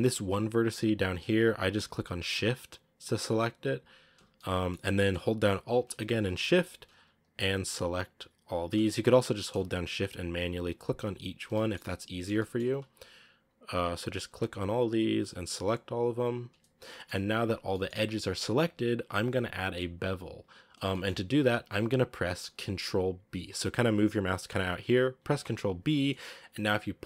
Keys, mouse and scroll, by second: 3.7 shift+right click, 4.2-6.7 middle drag, 6.7-11.5 alt+shift+right drag, 11.5-13.3 shift+middle drag, 13.8-16.6 shift+right drag, 16.6 scroll down 3, 16.8 shift+middle click, 16.9-17.6 shift+scroll up 3, 17.6-25.2 middle drag, 25.2 ctrl+b.